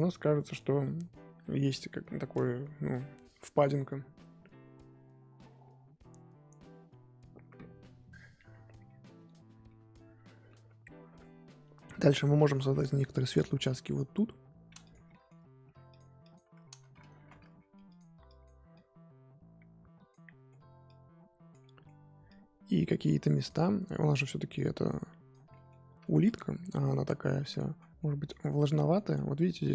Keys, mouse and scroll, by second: 0.0-2.7 scroll up 2, 7.9-8.5 scroll up 3, 8.5-8.8 scroll down 1, 8.8-14.9 middle drag, 14.9 click, 15.1 middle click, 15.6 f, 16.2 click, 17.2 ctrl+z, 17.4 f, 18.2-20.2 drag, 20.2 middle click, 20.8 click, 21.6 middle click, 22.3-23.6 drag, 23.6 middle click, 24.5 click, 25.5 middle click, 26.0 ctrl+z, 26.2-27.5 drag, 27.5-29.7 middle drag.